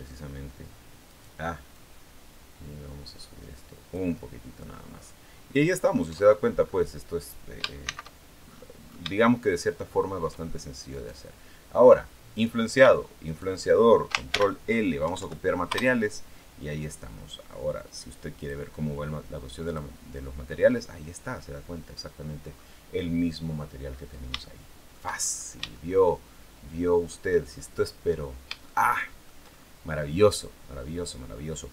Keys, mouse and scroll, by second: 0.9 right click, 1.5-3.9 drag, 4.1-4.5 scroll down 1, 4.8-5.1 scroll down 1, 5.9 Tab, 6.5-6.8 scroll up 1, 7.7 shift+c, 9.0-10.1 shift+middle drag, 10.7 right click, 12.1 right click, 13.1 shift+right click, 14.1 ctrl+shift+l, 14.9 ctrl+Down, 15.5 ctrl+Return, 18.2 click, 19.5 click, 20.4-22.3 scroll up 1, 22.3 scroll down 1, 23.3-23.6 scroll up 1, 24.2 shift+middle click, 25.0-25.8 shift+scroll up 4, 25.5 shift+middle click, 27.3 shift+scroll down 2, 27.9-28.5 scroll up 3, 28.5 shift+middle click, 30.2-30.5 scroll down 2.